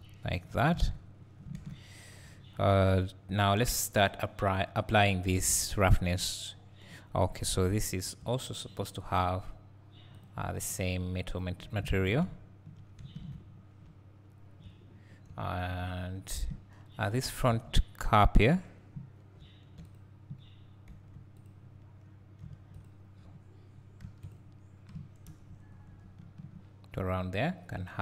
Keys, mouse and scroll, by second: 0.0 `, 0.8 alt+a, 1.2-2.2 scroll down 2, 2.2 `, 3.0-4.1 scroll up 2, 4.1-5.5 scroll up 1, 5.5-7.5 scroll down 2, 11.9 alt+a, 12.2 `, 13.6 scroll up 1, 13.9 `, 17.3 click, 17.7 Tab, 18.0-18.3 scroll up 1, 20.0 click, 21.0 3, 21.5 click, 22.6 1, 22.7 click, 25.4 ctrl+KP_Add.